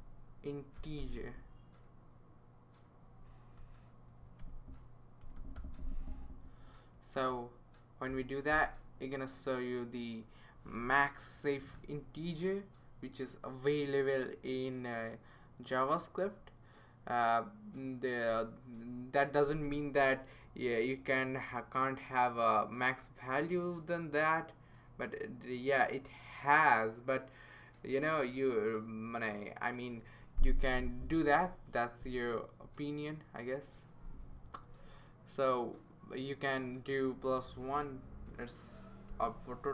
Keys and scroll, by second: 0.0-1.3 typing, 3.8-6.0 typing, 39.1 1.